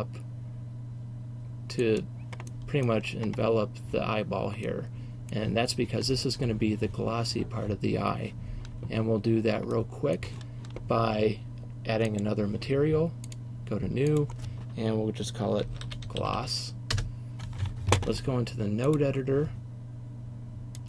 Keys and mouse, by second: 2.0-2.5 drag, 2.5-4.8 middle drag, 13.4-17.0 drag, 17.0 s, 19.0-19.7 drag, 19.9 click.